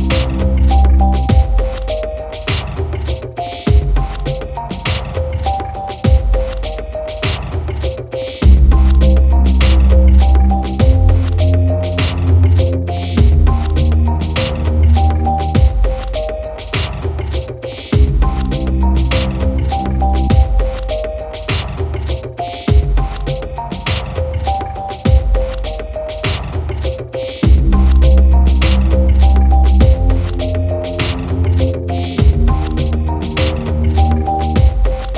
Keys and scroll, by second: 2.9 ctrl+j, 31.7 ctrl+=.